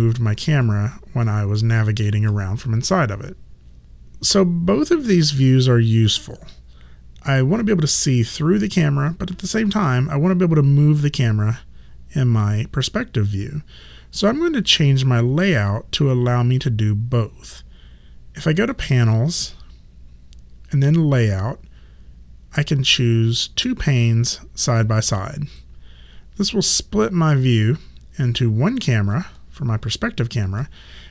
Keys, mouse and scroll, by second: 0.3 alt+right click, 0.9 alt+click, 1.6 alt+middle click, 11.1 click, 18.6 click, 25.1 click, 29.1 alt+click.